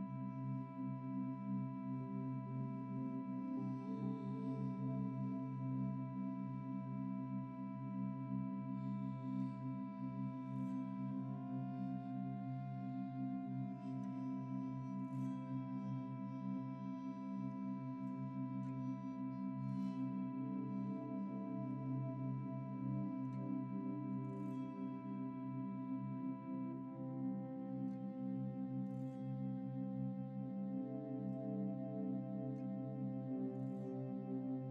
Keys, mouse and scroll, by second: 1.2-2.0 typing, 1.6 Return, 4.2 typing, 10.2-10.6 typing, 10.7 Return, 14.2 double click, 14.3 typing, 14.7 double click, 17.2 double click, 18.5 typing, 20.0-20.7 typing, 23.4 ctrl+s, 28.2 double click, 30.1 double click, 31.5 F12, 33.8 Escape.